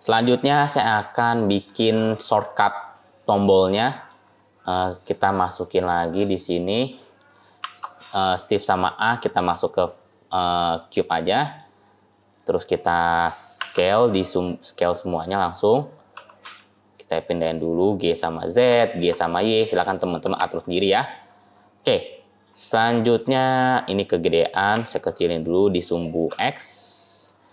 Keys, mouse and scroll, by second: 1.1-1.5 scroll up 2, 1.5 click, 1.9 middle click, 3.7 middle click, 4.3-4.9 scroll up 3, 4.9-5.9 scroll down 2, 5.9 click, 7.5 shift+a, 11.0 middle click, 11.8 scroll down 1, 12.0 middle click, 12.8-13.4 scroll down 2, 13.4 scroll down 1, 13.4 s, 16.0 g, 18.6 g, 21.1-23.0 scroll up 6, 21.7 middle click, 23.0 middle click, 24.6 s.